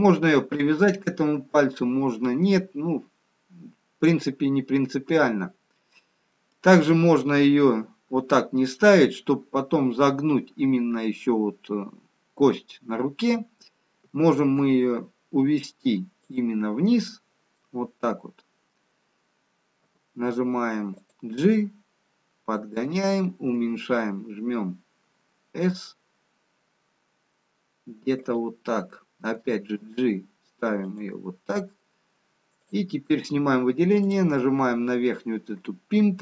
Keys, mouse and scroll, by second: 2.3-3.8 scroll up 4, 3.8-4.4 scroll down 4, 15.4 g, 17.8 middle click, 20.3 g, 21.7 middle click, 24.3 s, 29.9 g, 32.6 click, 34.0 click.